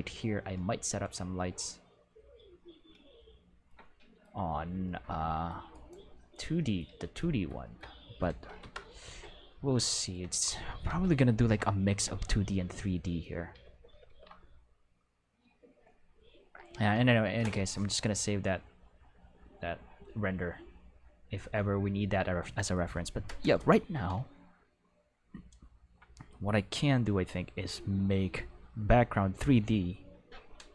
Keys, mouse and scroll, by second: 3.8-4.2 middle drag, 5.1-6.4 middle drag, 6.6 middle drag, 6.8 q, 8.6 Home, 13.5 ctrl+s, 13.7 ctrl+s, 13.9 ctrl+s.